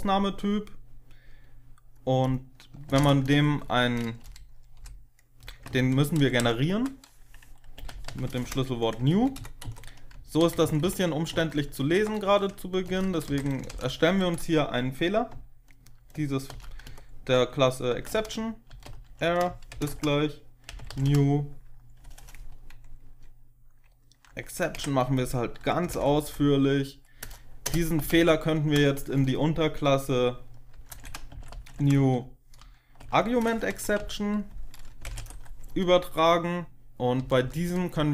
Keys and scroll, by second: 2.5-3.3 typing, 4.1 Delete, 4.7 Delete, 5.6 ctrl+Left, 5.9 ctrl+Left, 6.1 ctrl+Left, 6.3 ctrl+Left, 7.5-8.5 typing, 9.1 ctrl+Left, 9.3 ctrl+Left, 9.5 ctrl+Right, 10.3 ctrl+shift+Right, 10.5 ctrl+shift+Right, 10.7 ctrl+shift+Right, 11.2 ctrl+shift+Right, 11.7 ctrl+x, 12.8 BackSpace, 13.2 End, 13.3 ctrl+shift+Right, 13.6 shift+Home, 16.3-16.7 typing, 17.8 Tab, 18.0-21.3 typing, 24.0 space, 24.6 Tab, 25.5-26.2 typing, 27.6-28.6 typing, 30.6-35.4 typing, 37.1 Left, 37.3 Left, 37.9-38.1 typing.